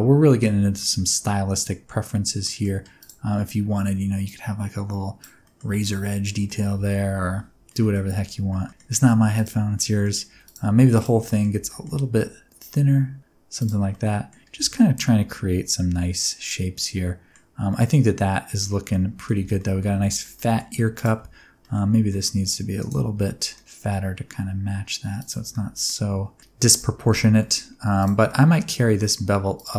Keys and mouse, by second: 0.0 Tab, 0.3 middle click, 0.8 Tab, 0.8-1.9 middle drag, 2.4 middle click, 3.0 click, 4.4 click, 5.4 middle click, 5.6 Tab, 5.8-6.4 middle drag, 6.7 ctrl+z, 7.2 ctrl+z, 7.7 middle click, 8.5 shift+middle click, 9.1 2, 9.7 middle click, 10.3 3, 11.3 middle click, 11.6 g, 11.7 middle click, 13.6 click, 14.0 middle click, 14.5 Tab, 14.7-17.3 middle drag, 17.7 middle click, 18.9-19.2 middle drag, 19.4 alt+a, 19.5 middle click, 20.1 shift+middle click, 20.3 middle click, 20.9 click, 21.2 Tab, 21.6 middle click, 22.0 g, 22.1 middle click, 22.8 right click, 23.1 g, 23.5 middle click, 25.2 click, 25.3 Tab, 25.5 middle click, 26.7 Tab, 27.4 shift+middle click, 28.2 middle click, 28.2 2, 28.8 middle click.